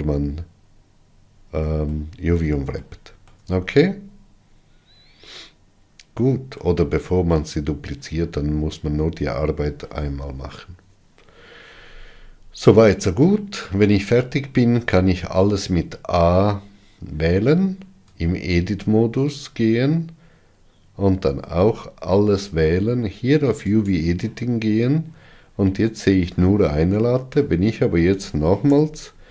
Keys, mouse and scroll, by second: 0.8-2.0 scroll down 11, 2.6-7.2 shift+middle drag, 15.5 a, 18.8 Tab, 22.0 a, 24.4-27.3 drag.